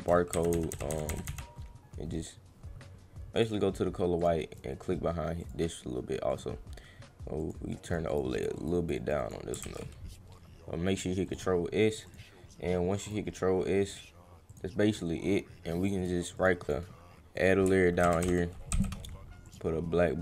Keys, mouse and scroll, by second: 3.3 click, 4.1 click, 4.5 click, 5.4 click, 6.3 click, 7.4 click, 7.7 drag, 8.0 click, 8.3 click, 8.5 click, 8.7 click, 9.2 click, 9.7 ctrl+s, 11.2 click, 12.0 click, 13.1 click, 14.5 click, 16.0 click, 16.3 right click, 16.6 click, 17.4 click, 19.5 click.